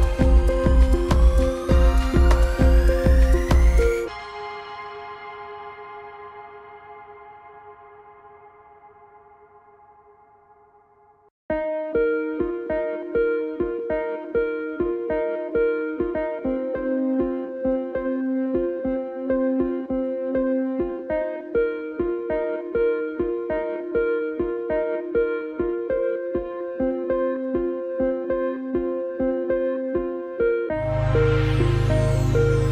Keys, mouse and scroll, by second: 0.2 Down, 0.5 Up, 0.8 click, 1.8 Down, 2.3 Right, 2.6 click, 3.7 alt+scroll down 2, 3.9 space, 4.1 click, 4.3 space, 5.9 m, 6.4-7.2 alt+scroll up 2, 7.2 click, 8.4 x, 8.7 click, 10.5 v, 10.7 click, 12.5 z, 12.6 click, 13.6 ctrl+z, 14.4 typing, 15.9 z, 17.0 click, 17.2 scroll up 1, 17.4 click, 18.5 m, 19.2 click, 21.9 v, 22.1 click, 22.7 x, 23.3 click, 23.6 ctrl+z, 23.9 click, 26.5 ctrl+z, 26.9 click, 27.5-28.2 typing, 28.9 ctrl+shift+z, 29.4 m, 30.4 shift+x, 31.6 ctrl+click.